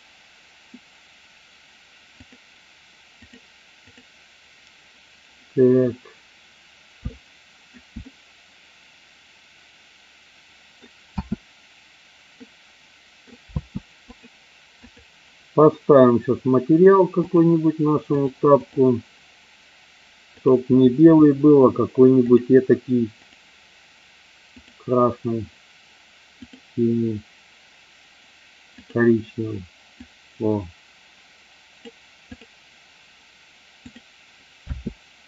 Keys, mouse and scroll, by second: 2.2-5.3 drag, 7.2-7.8 alt+middle drag, 8.1-10.8 middle drag, 11.1 space, 12.3-13.2 middle drag, 13.4 space, 17.2 click, 18.1-18.7 drag, 22.2 click, 32.3 click, 33.8 click, 34.6 space.